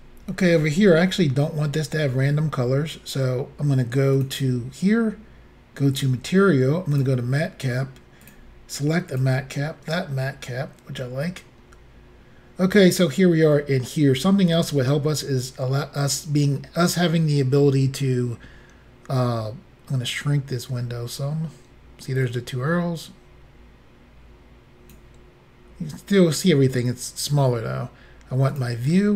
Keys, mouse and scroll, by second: 4.2 click, 6.0 click, 6.9 click, 8.2 click, 9.1 click, 22.3 click, 25.7-26.2 scroll down 1, 28.6 click.